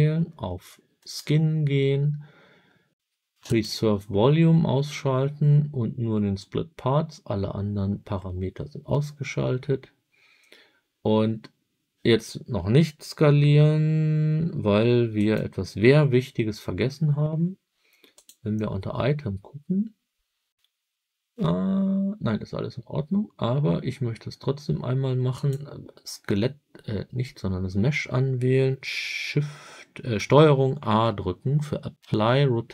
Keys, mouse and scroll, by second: 0.9 click, 3.4 click, 15.1 click, 18.1 click, 25.2 click, 30.7 ctrl+a.